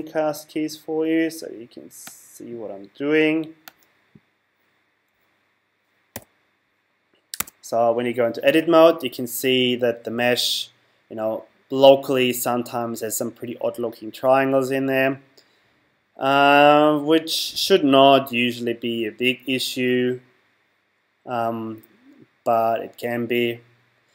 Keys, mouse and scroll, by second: 3.9 click, 6.1 n, 7.4 Tab.